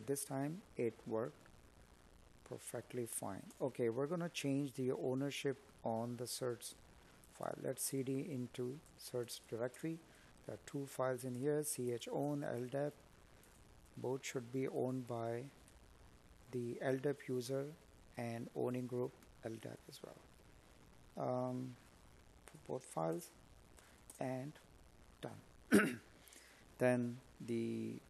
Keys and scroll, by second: 3.8 space, 11.4 space, 25.7 space.